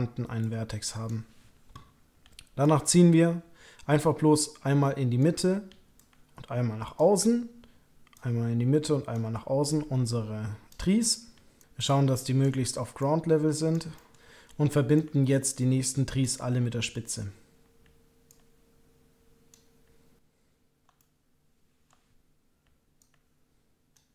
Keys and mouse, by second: 0.4 click, 2.6-5.2 ctrl+drag, 5.9-7.0 ctrl+drag, 8.1-9.1 ctrl+drag, 9.7-10.7 ctrl+drag, 11.5 ctrl+click, 11.7 click, 13.0 click, 13.9 middle click, 14.9-16.2 ctrl+drag, 18.3-19.5 ctrl+drag, 21.0 shift+middle click, 21.8 click, 23.0 ctrl+click.